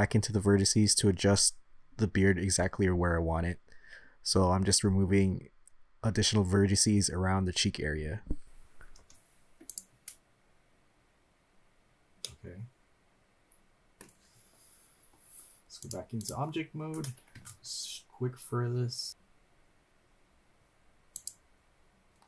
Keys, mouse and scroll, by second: 0.0-1.7 shift+drag, 3.7 Delete, 5.4 shift+middle click, 6.4-7.8 shift+drag, 9.0 Delete, 9.8 Delete, 12.2-14.1 middle drag, 15.8 click, 17.4 shift+a.